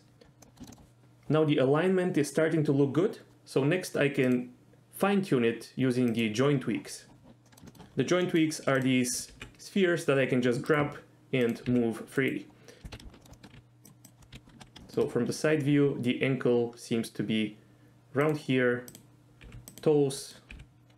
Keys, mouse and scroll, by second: 0.4 middle drag, 0.6 shift+middle drag, 4.3 click, 6.1 click, 7.5 middle drag, 7.7 shift+middle click, 8.2 middle click, 8.8 click, 9.3 g, 10.7 right click, 11.7 g, 12.1 right click, 12.9 KP_1, 13.2 shift+middle click, 13.3 shift+middle click, 13.5 g, 13.8 click, 14.0 click, 14.3 KP_3, 14.8 shift+middle click, 15.7 g, 18.2 click, 19.4 g, 19.7 click, 20.2 click, 20.5 g.